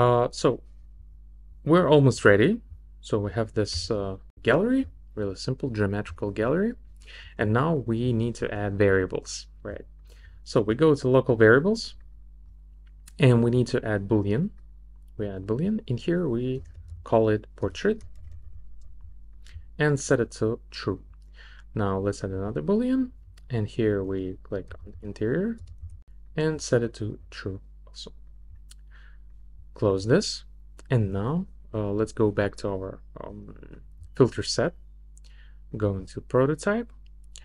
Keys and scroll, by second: 3.7 r, 16.3-18.9 typing, 24.1-26.6 typing.